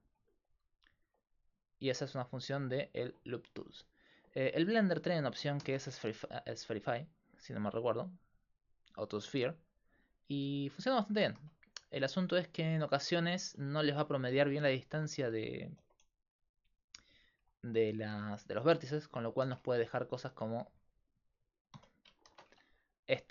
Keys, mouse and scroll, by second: 0.8-2.4 middle drag, 2.5 middle click, 3.1-4.6 middle drag, 4.6 ctrl+z, 5.6 alt+shift+s, 11.0 alt+shift+s, 13.7 ctrl+z, 15.7 alt+., 16.3 s, 17.1 click, 17.4 a, 19.4 alt+shift+s, 19.5 click, 21.8 ,, 22.3 alt+shift+s.